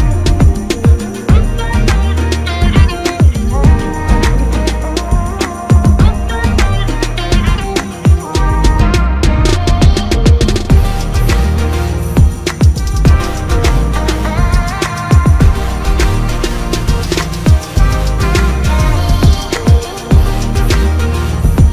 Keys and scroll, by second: 3.1 ctrl+KP_Subtract, 3.7 ctrl+space, 17.6 typing.